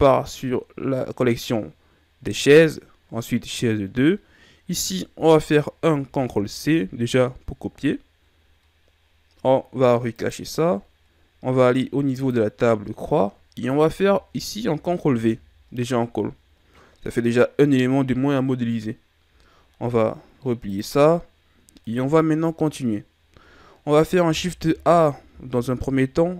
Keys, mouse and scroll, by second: 5.8 ctrl+c, 10.1 click, 12.0 click, 14.7 ctrl+v, 20.6 click, 21.7 right click, 24.6 KP_1, 25.4 shift+a.